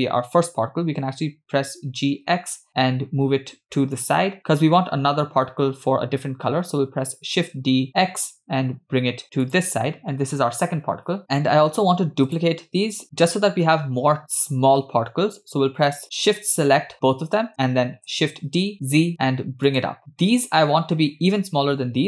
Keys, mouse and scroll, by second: 0.9 g, 7.4 shift+d, 12.3 shift+click, 13.0 shift+middle click, 17.9 shift+d.